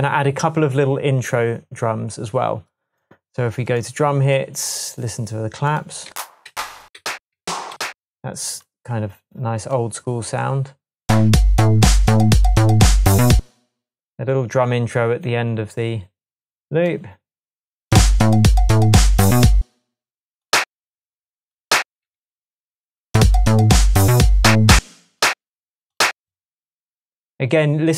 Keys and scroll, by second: 6.1 Down, 7.0 Down, 7.4 Down, 7.7 Up, 13.4 space, 19.6 space, 22.2 Right, 24.8 space.